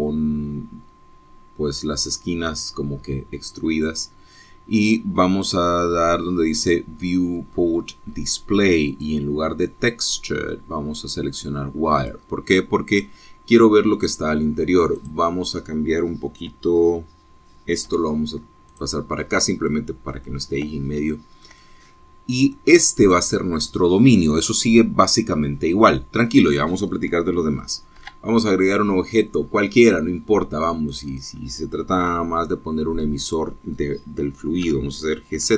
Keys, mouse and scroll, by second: 7.6 click, 8.4-9.0 scroll down 2, 9.9 click, 13.0 click, 14.0-15.2 middle drag, 16.0 click, 18.9 g, 19.7 click, 20.2-20.7 scroll up 1, 20.7 click, 21.5 middle click, 21.7 scroll down 1, 22.0-24.6 shift+middle drag, 29.0 shift+a, 32.0 click, 33.0 s, 34.2 click.